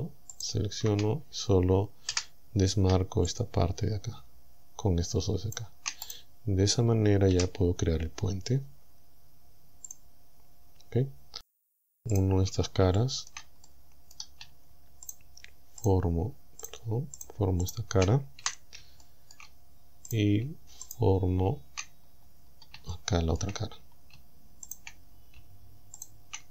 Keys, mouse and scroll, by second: 0.4 alt+shift+right click, 1.2 scroll down 1, 2.2 c, 3.3-5.8 shift+drag, 6.1 right click, 7.4 w, 9.9 click, 10.7-11.0 scroll down 2, 11.0 middle click, 11.2-11.5 scroll up 2, 12.2 right click, 13.0 shift+middle click, 13.6 shift+middle click, 15.1 shift+right click, 15.8 shift+right click, 16.7 shift+right click, 17.2 shift+right click, 17.7 shift+right click, 18.4 f, 19.0 shift+click, 20.1 right click, 20.9 shift+right click, 22.1-22.8 scroll up 2, 22.9 shift+middle click, 23.8 shift+scroll up 3, 24.7 shift+right click, 25.1 shift+scroll down 3, 26.0 shift+right click.